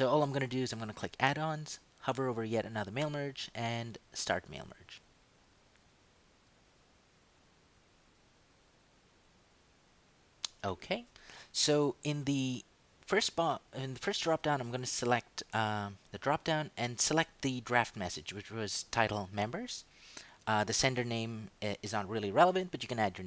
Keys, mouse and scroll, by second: 0.8 click, 4.6 click, 14.7 click, 19.4 click.